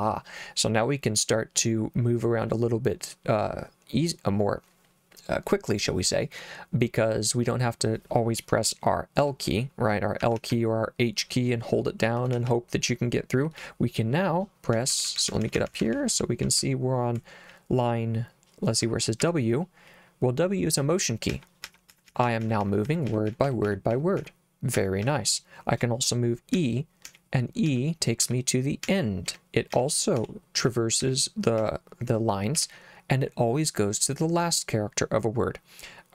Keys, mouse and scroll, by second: 9.2-10.5 typing, 12.4 l, 12.5 l, 14.8-17.5 typing, 19.2 l, 21.3-25.1 typing, 26.6-32.6 typing.